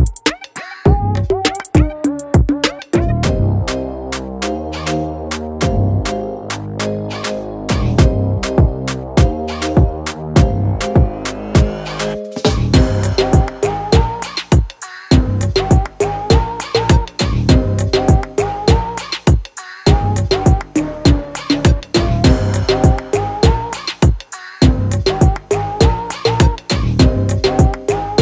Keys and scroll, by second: 0.3 [, 0.5 [, 0.8 ctrl+z, 0.8 ctrl+z, 0.9 ctrl+z, 1.0 ctrl+z, 1.3 ctrl+z, 1.4 ctrl+z, 4.6 ], 4.8 ], 9.0 [, 9.1 [, 9.2 [, 10.3 [, 10.3 ], 10.5 ], 13.1-13.4 ], 15.3-16.0 typing, 18.0 ], 26.8 ctrl+z.